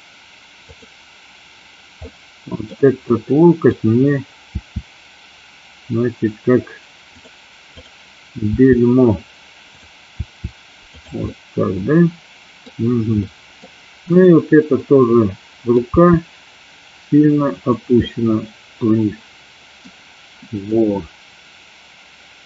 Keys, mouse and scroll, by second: 0.8-1.9 drag, 2.1 middle click, 3.1-3.8 middle drag, 4.7 r, 7.2 click, 7.7 click, 8.6 r, 9.7 click, 10.2 r, 11.0 click, 11.3-12.7 middle drag, 13.3 middle click, 14.2 click, 14.8 middle click, 16.0 r, 17.6 click, 18.1-20.0 middle drag, 20.7-22.4 middle drag.